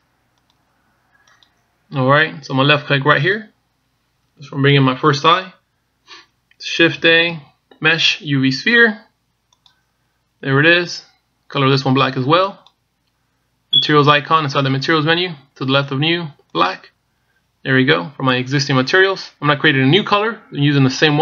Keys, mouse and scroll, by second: 3.9 click, 7.8 shift+a, 13.2 click.